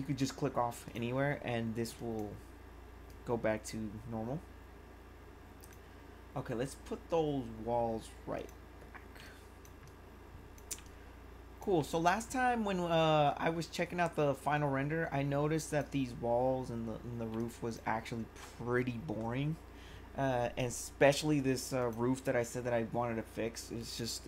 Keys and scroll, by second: 9.2 1, 17.3 1.